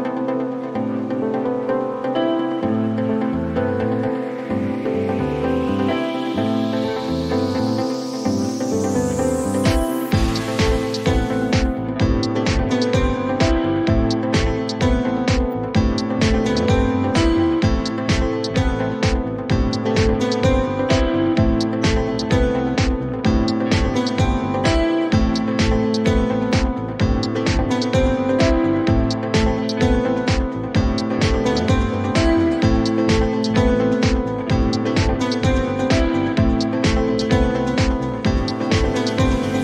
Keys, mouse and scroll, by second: 0.0-0.7 typing, 1.9 u, 2.5 click, 2.7 click, 5.6 click, 7.7 click, 9.6 click, 11.2-12.1 typing, 13.3 Return, 16.0 click, 16.3-17.2 typing, 16.7-18.6 drag, 18.8-21.1 drag, 19.0-19.9 typing, 20.0 Return, 22.0 click, 22.7 click, 23.7 click, 24.7 click, 27.9 click, 29.6-30.3 scroll, 31.7 click, 33.8 click, 36.1 click, 36.6 0, 36.9 Return, 38.9-39.5 typing, 39.1-39.6 drag.